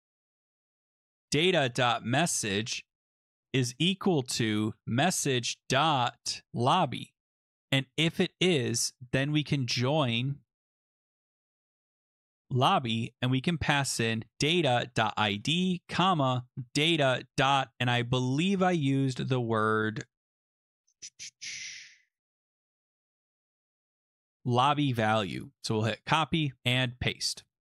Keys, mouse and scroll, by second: 0.6-12.6 typing, 13.9-17.4 typing, 19.4 click, 19.9 click, 20.5-21.3 scroll, 21.5-22.2 scroll, 22.2-23.4 scroll, 24.4 click, 24.5 click, 25.1 ctrl+c, 26.0 click, 26.6 click, 26.9 ctrl+v.